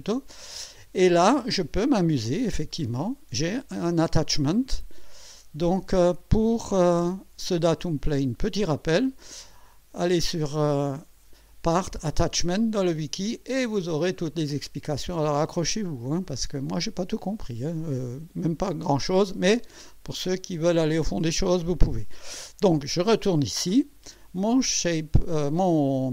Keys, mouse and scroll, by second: 5.0 click, 9.9 click, 13.3-16.6 scroll down 15, 17.3-17.6 scroll down 2, 18.1-19.3 scroll up 6, 20.1 scroll up 2, 22.8 click.